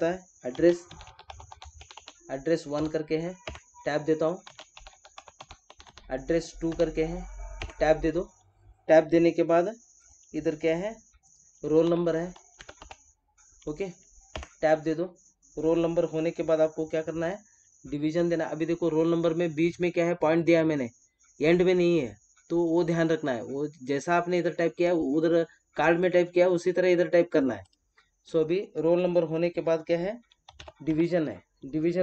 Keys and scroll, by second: 3.4 Tab, 7.6 Tab, 14.3 Tab.